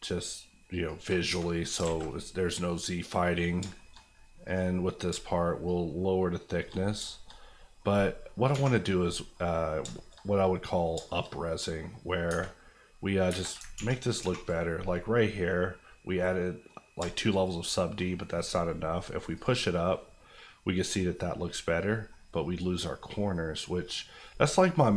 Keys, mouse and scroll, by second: 0.8 shift+click, 1.1 click, 1.3 Tab, 1.7 alt+middle click, 1.8 alt+a, 2.1-3.6 middle drag, 3.6 shift+middle click, 4.0-4.4 scroll up 1, 4.4 click, 5.1 shift+click, 5.8 click, 5.9 shift+click, 6.8 click, 6.9-7.4 scroll down 2, 7.0 shift+middle click, 7.3 middle click, 7.6 middle click, 9.3 middle click, 9.7-10.2 scroll up 3, 9.9 shift+middle click, 10.1 middle click, 10.5 middle click, 10.9 shift+middle click, 11.2 shift+scroll up 2, 11.6 middle click, 12.3 Tab, 13.7 ctrl+1, 14.2 ctrl+2, 15.6 scroll down 1, 16.1 middle click, 16.9 shift+middle click, 17.4 scroll down 1, 17.6 middle click, 19.3 click, 20.3 scroll up 1, 20.9 middle click, 21.0 scroll up 1, 21.6-21.9 scroll down 1, 21.9 middle click, 22.1-23.1 scroll up 1, 23.1 middle click, 23.8-24.9 scroll up 1.